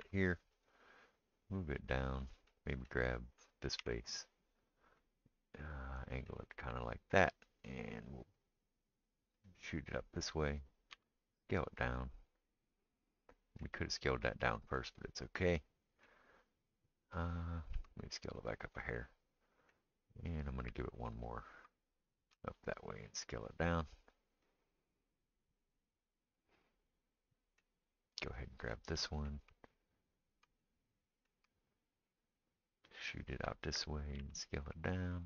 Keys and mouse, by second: 3.8 3, 3.9 click, 4.1-28.2 middle drag, 9.3 ctrl+right click, 10.9 s, 17.7 s, 22.3 s, 28.2 click, 28.3-32.9 middle drag, 32.9 ctrl+right click, 33.1-35.2 ctrl+middle drag, 34.2 s.